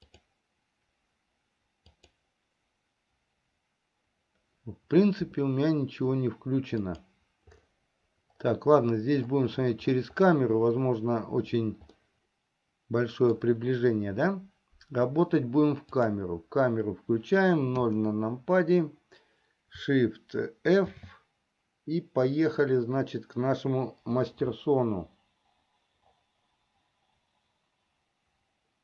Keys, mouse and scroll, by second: 12.6 middle click, 13.2-14.3 drag, 16.6 click, 18.4 KP_0, 21.2 shift+f.